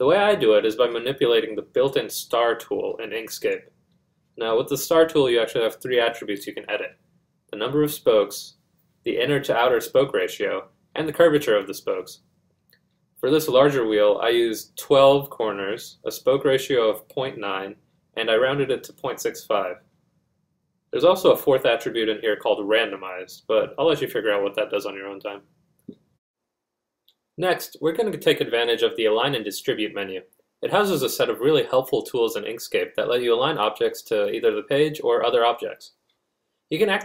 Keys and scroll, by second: 9.6-10.9 typing, 11.1 Return, 14.9 ., 15.3 9, 15.7 Return, 18.5 ., 20.2 4.